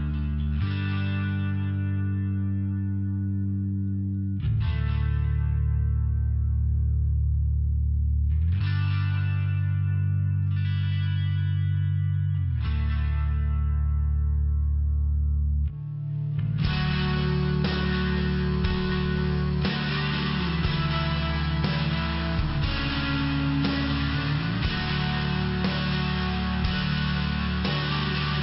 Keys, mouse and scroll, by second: 0.1 click, 0.3 click, 0.7 click, 0.7 click, 1.1 click, 1.3 click, 1.6 click, 1.8 click, 2.2 click, 2.3 click, 2.6 click, 2.7 double click, 3.1 double click, 3.3 double click, 3.5 double click, 3.6 double click, 4.0 double click, 4.1 double click, 4.6 double click, 4.7 double click, 5.6 click, 7.1 click, 7.8 click, 7.9 click, 8.4 click, 8.6 click, 9.0 click, 9.2 click, 10.6 click, 11.6 click, 11.8 click, 12.3 click, 12.5 click, 14.0 click, 14.1 click, 14.4 click, 14.6 click, 15.2 click, 15.3 click, 15.9 click, 16.9 click, 17.0 click, 17.1 click, 17.1 click, 17.3 click, 17.8 click, 18.0 click, 18.7 click, 18.7 click, 21.9 typing, 22.0 click, 22.4 click, 23.1 click, 24.1 click, 24.2 click, 24.6 click, 24.7 double click, 25.0 double click, 25.2 double click, 25.6 double click, 25.7 double click, 26.1 click.